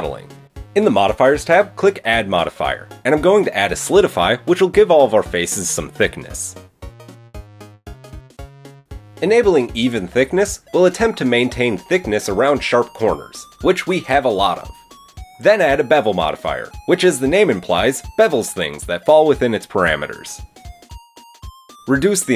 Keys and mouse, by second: 0.6-3.2 drag, 3.2 middle click, 3.3-7.4 drag, 7.5-7.8 shift+middle drag, 8.0 click, 10.8-14.6 middle drag, 14.6-20.4 drag, 20.4-22.0 middle drag, 22.0-22.3 drag.